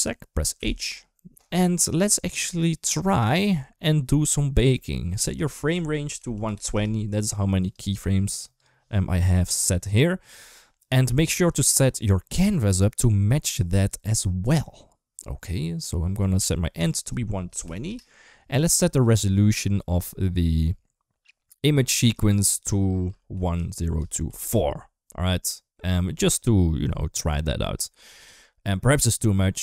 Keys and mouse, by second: 0.4 h, 5.2-6.6 drag, 7.5 click, 11.4 click, 16.7-17.7 drag, 21.8-24.3 drag.